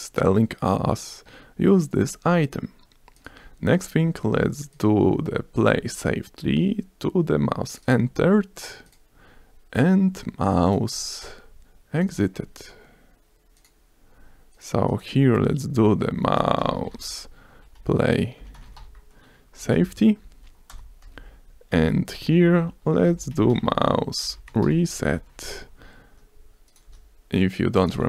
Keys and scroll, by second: 17.7-18.4 typing, 19.8 p, 20.0 l, 20.1 a, 20.2 y, 21.0 Down, 21.2 Return, 21.7 Down, 22.2 BackSpace, 22.5 Down, 24.4-26.1 typing, 26.4 Return, 26.6 ctrl+s.